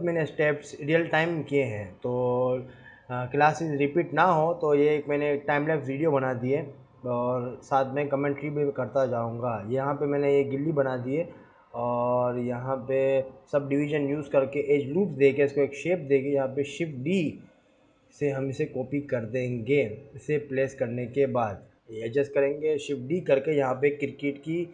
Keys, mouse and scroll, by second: 0.3 ctrl+b, 1.8-2.2 scroll up 1, 2.8 click, 3.4 Tab, 3.9 scroll down 1, 4.4-5.0 scroll up 3, 5.0 Tab, 5.7 scroll down 1, 5.9 scroll up 1, 7.2 Tab, 7.7 ctrl+1, 8.2 ctrl+r, 8.6 Tab, 9.0 ctrl+r, 10.4 ctrl+r, 11.5 Tab, 11.9 scroll down 1, 12.8 click, 13.0 scroll up 2, 13.2 g, 13.8-14.3 scroll up 4, 14.3 Tab, 14.4 ctrl+r, 15.3 ctrl+r, 16.2-16.5 scroll down 1, 16.5 Tab, 16.9 scroll down 1, 17.4 scroll up 1, 17.5 Tab, 17.9 ctrl+r, 18.8 ctrl+r, 19.8-20.5 scroll down 3, 19.9 Tab, 20.9 s.